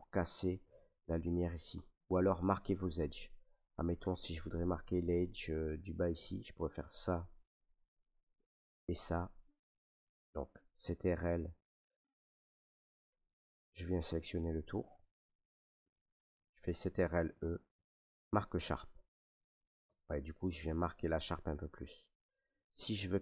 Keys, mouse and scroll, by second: 1.7 Tab, 3.5 middle click, 3.7 Tab, 5.2 Tab, 6.4 right click, 7.8 middle click, 8.9 ctrl+right click, 10.4 right click, 11.2 middle click, 12.4 ctrl+right click, 13.5 middle click, 15.0 ctrl+right click, 16.8 ctrl+e, 19.0 click, 19.8 Tab, 21.9 middle click, 22.3 Tab.